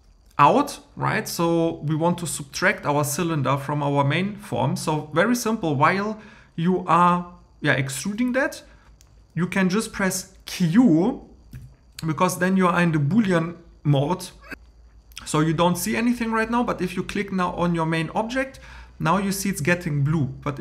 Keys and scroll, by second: 11.5 q.